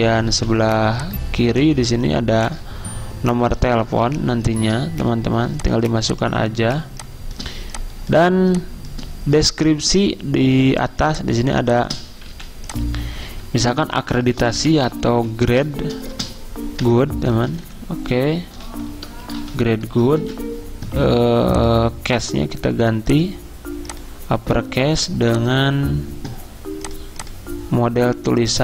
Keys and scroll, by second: 3.3-4.0 typing, 5.4-8.5 typing, 10.9 z, 12.6-14.3 typing, 15.4-17.8 typing, 19.1-20.7 typing.